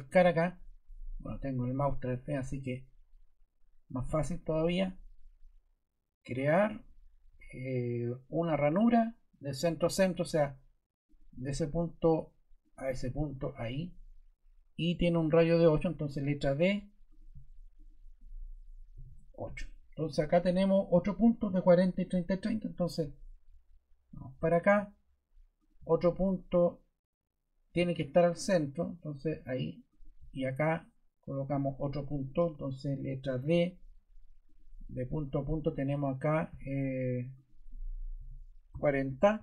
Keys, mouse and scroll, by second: 4.0 click, 15.1 Escape, 16.1 d, 17.1 click, 17.7 click, 18.9 8, 19.0 Return, 31.5 click, 32.4 ↺, 33.4 d, 38.1-39.2 typing, 39.3 Return.